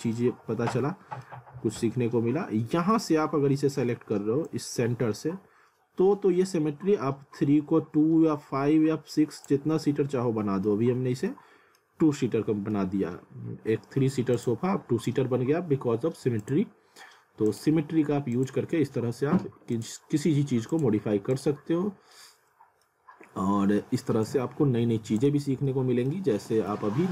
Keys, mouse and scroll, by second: 0.4 scroll up 1, 0.8 middle click, 1.3-1.8 scroll up 1, 1.9 middle click, 3.9 middle click, 4.5 click, 9.7 alt+middle click, 10.9 scroll down 1, 11.3 alt+middle click, 11.9 scroll up 1, 12.2 alt+middle click, 14.4 click, 19.2 scroll down 1, 19.7 click, 21.5 click, 21.7-22.1 scroll down 1, 23.0 scroll up 1, 24.3 click, 25.3 z, 25.7 alt+middle click, 26.2 alt+w, 26.7 z.